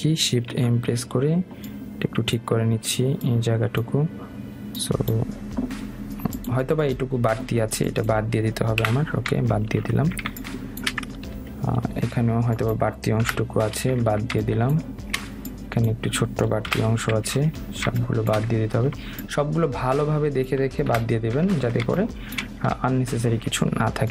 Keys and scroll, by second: 9.9 Delete.